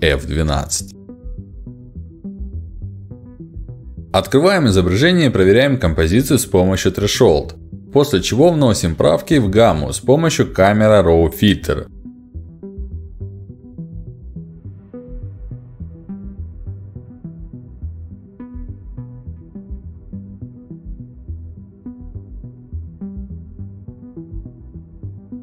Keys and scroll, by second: 8.0 ctrl+s.